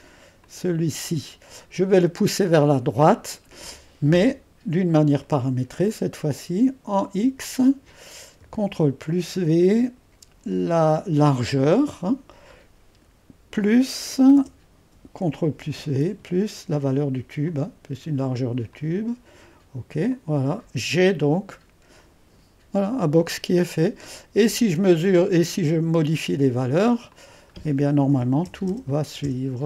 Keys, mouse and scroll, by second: 5.2-8.4 drag, 9.0 ctrl+v, 11.5-14.3 drag, 15.4 ctrl+v, 17.4 click, 18.7-26.6 drag, 27.1-28.1 drag, 27.6-28.6 typing, 29.2 Return.